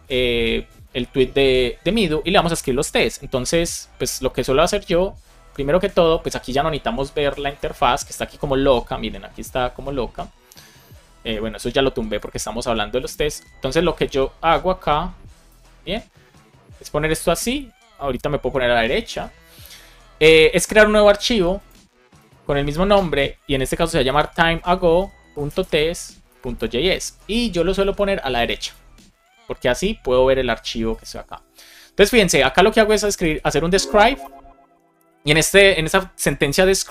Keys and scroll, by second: 24.7 shift+a, 26.4 Return, 33.4 shift+9, 33.9 shift+', 34.1 space.